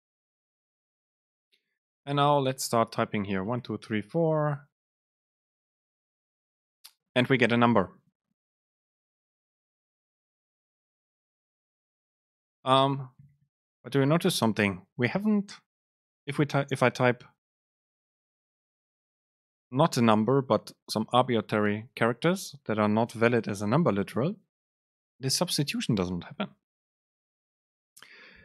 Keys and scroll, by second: 9.2 ctrl+shift+super+Left, 9.8 shift+Right, 10.2 BackSpace, 12.9 Return, 26.8 BackSpace.